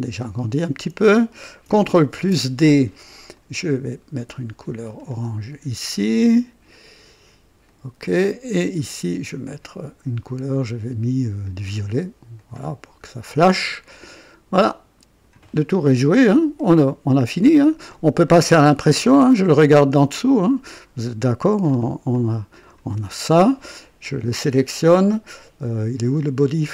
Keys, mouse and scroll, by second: 0.2 right click, 1.1 click, 2.1 ctrl+d, 2.2 ctrl+d, 3.3 click, 4.9 click, 7.6 click, 8.6 click, 9.4 click, 11.4 click, 12.3 click, 13.4 click, 14.0 click, 14.5 click, 15.4 right click, 16.1-18.1 drag, 18.2 right click, 19.3 KP_5, 19.8 scroll up 1, 20.0 right click, 20.8 scroll up 1, 21.6 scroll down 1, 22.1 click, 22.9 right click, 24.0 click, 26.3 click.